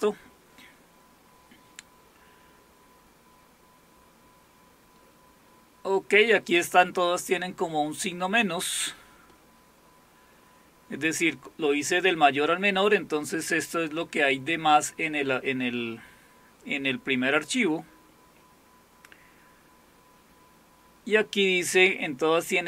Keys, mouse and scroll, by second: 0.0 Return, 2.8-4.5 scroll up 2, 4.5-6.2 scroll up 1, 6.2-8.8 scroll up 1, 8.8-9.5 scroll up 1, 9.5-11.8 scroll up 1, 11.8-12.6 scroll up 1, 12.6-13.5 scroll up 1, 13.5-15.1 scroll up 1, 15.1-15.9 scroll up 1, 15.9-17.4 scroll up 1, 17.4-18.1 scroll up 1, 18.1-19.2 scroll up 1, 19.2-21.2 scroll up 1, 21.2-22.6 scroll up 1.